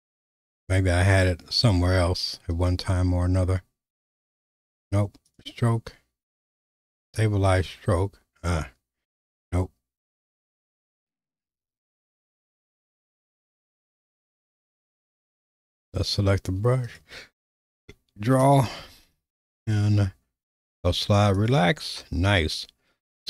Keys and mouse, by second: 5.3-12.2 drag, 15.1 click, 16.9 right click, 20.6 right click.